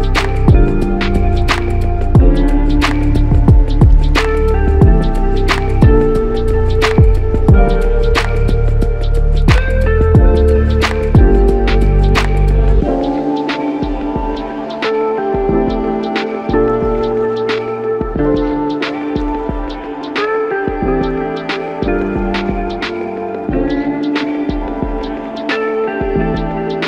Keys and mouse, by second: 1.3 alt+shift+click, 2.0 ctrl+alt+click, 3.6 shift+click, 6.0 alt+click, 7.3 alt+shift+click, 7.9 alt+click, 16.0 ctrl+i, 17.3 alt+click, 21.4 alt+click.